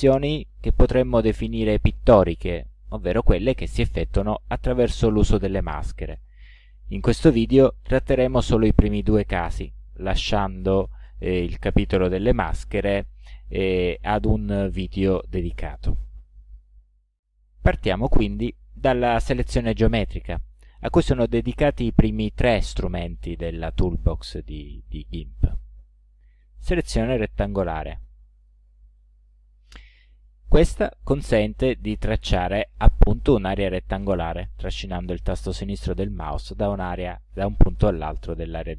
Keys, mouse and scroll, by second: 28.4 click, 32.1-34.2 drag.